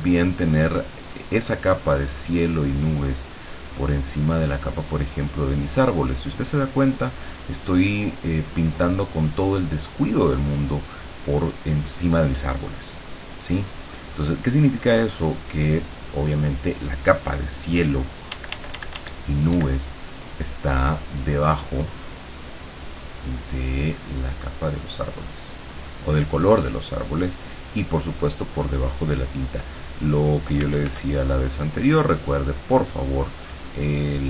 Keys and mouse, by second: 18.3 d, 20.1-23.7 drag, 24.0-27.7 drag, 28.1-30.7 drag, 30.7 f, 31.2-34.2 drag.